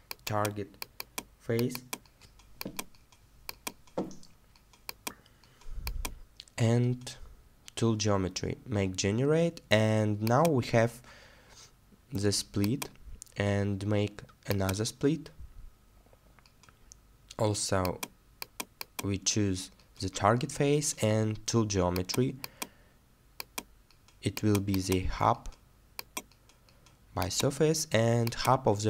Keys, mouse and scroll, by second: 6.7 middle click.